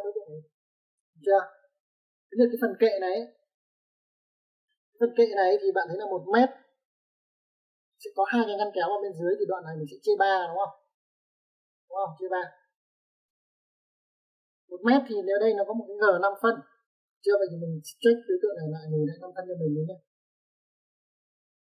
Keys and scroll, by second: 0.3 typing, 20.4 space.